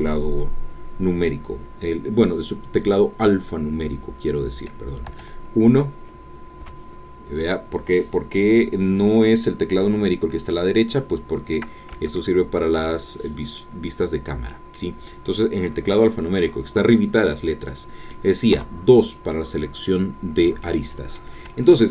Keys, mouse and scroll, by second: 5.1 1, 6.6 KP_2, 11.9 KP_3, 13.6-14.9 middle drag, 18.5 2, 20.6-21.9 middle drag.